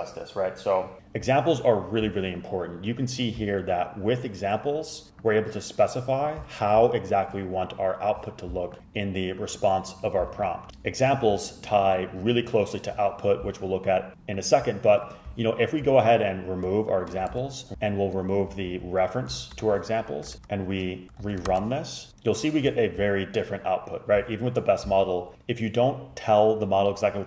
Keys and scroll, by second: 17.4 super+x, 17.7 super+z, 18.9 Page_Down, 18.9 Page_Up, 19.5 shift+super+Left, 19.7 super+x, 20.4 BackSpace, 21.3 s, 21.6 super+Return.